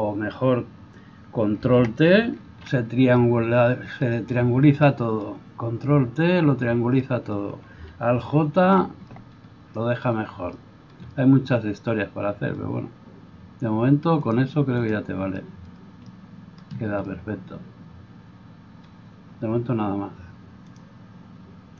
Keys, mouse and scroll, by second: 2.4 ctrl+t, 8.5 alt+j.